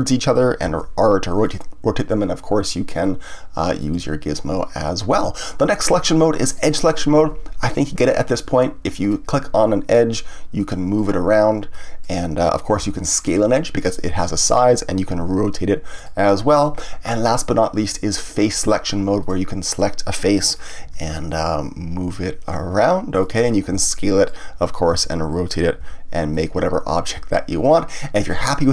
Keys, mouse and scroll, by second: 0.6 r, 1.5 click, 3.0-6.0 drag, 6.5 click, 9.0 click, 9.6 middle click, 10.6-12.8 drag, 12.8 s, 13.9 click, 15.1 r, 16.0 click, 17.8 click, 19.2 click, 19.6 click, 20.3 middle click, 20.8 g, 23.3 click, 23.7 s, 24.3 click, 24.9 r, 25.5 click, 25.8 g, 26.4 click, 27.1-28.7 middle drag.